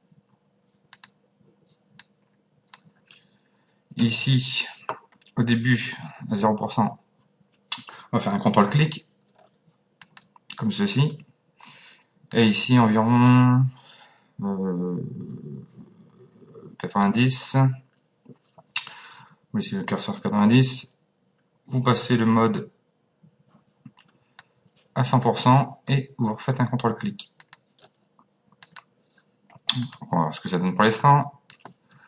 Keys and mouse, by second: 0.9 click, 10.0 click, 12.3 click, 22.6 click, 27.4 click, 28.6 click, 29.8 click.